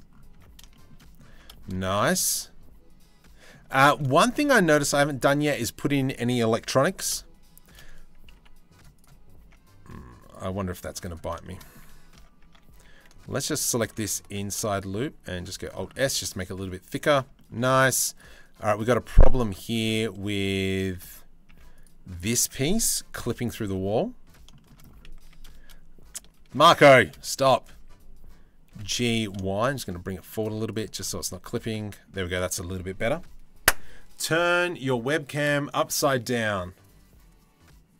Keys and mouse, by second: 0.0 Tab, 0.5 Tab, 0.6 click, 1.0 Tab, 1.5-3.2 drag, 3.3 shift+middle click, 4.3 ctrl+r, 6.5 ctrl+b, 6.8 shift+middle click, 8.0 Delete, 9.1 Tab, 9.9 click, 11.0 shift+middle drag, 12.4 3, 14.0 alt+s, 15.7 Tab, 20.6 Tab, 21.2 Tab, 21.4 click, 22.8 KP_3, 23.3 z, 24.2 shift+middle click, 24.9 a, 26.2 ctrl+z, 27.0 Tab, 27.4 a, 28.3 g, 30.1 z, 32.0 Tab.